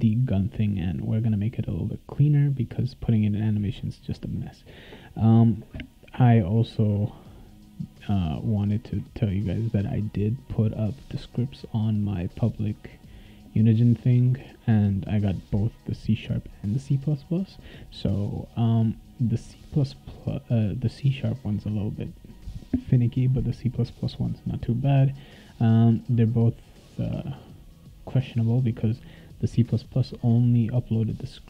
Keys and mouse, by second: 8.8 click, 24.1 click.